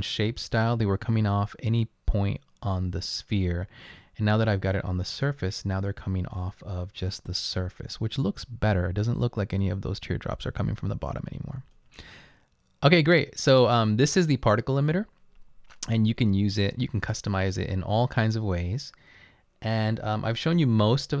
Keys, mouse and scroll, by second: 5.8 click.